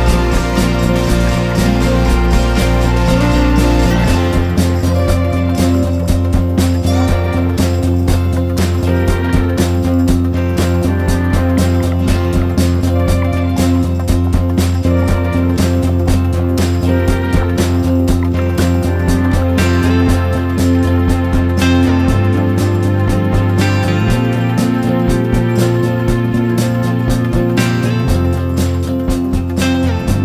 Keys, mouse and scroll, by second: 10.8-11.5 ctrl+scroll, 13.7-23.5 drag, 24.7 ctrl+scroll, 25.5 click, 27.5 ctrl+scroll, 29.3-30.2 drag.